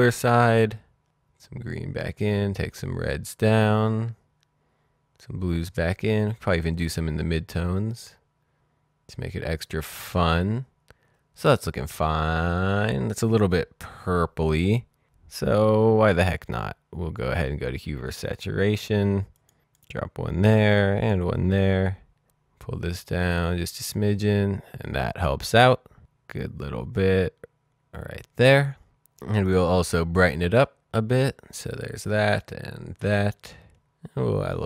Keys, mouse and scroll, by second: 0.7-2.7 scroll up 1, 2.7-4.2 scroll down 1, 4.3-6.0 scroll up 1, 6.0-6.5 scroll down 1, 6.5 scroll up 1, 6.7-7.3 scroll down 1, 7.5-8.1 scroll down 1, 8.2-9.0 scroll up 1, 9.0-10.9 scroll down 1, 14.9 click, 16.4 click, 18.4 click, 29.2 click, 30.8-31.7 scroll up 1, 32.7 click.